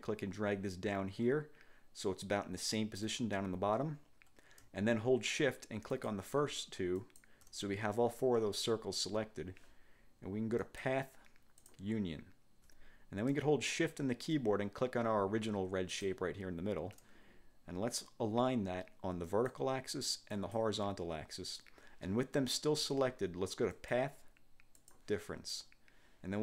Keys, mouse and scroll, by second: 6.0 shift+click, 7.1 shift+click, 10.8 click, 11.7 click, 16.0 shift+click, 19.4 click, 20.4 click, 23.9 click, 24.9 click.